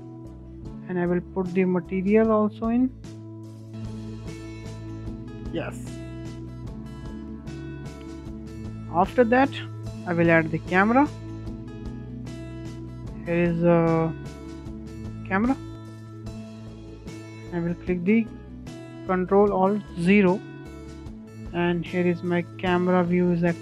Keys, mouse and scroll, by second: 0.5 click, 1.9 click, 2.7-4.3 drag, 4.3 scroll down 1, 4.5-5.5 middle drag, 5.5-5.8 scroll up 2, 5.8-7.3 middle drag, 7.3 scroll up 1, 7.6 shift+middle drag, 7.8 scroll down 2, 8.1-9.9 middle drag, 9.9 shift+a, 15.9-16.2 scroll down 2, 16.0-19.1 middle drag, 19.1 ctrl+alt+KP_0, 21.1-23.6 shift+middle drag.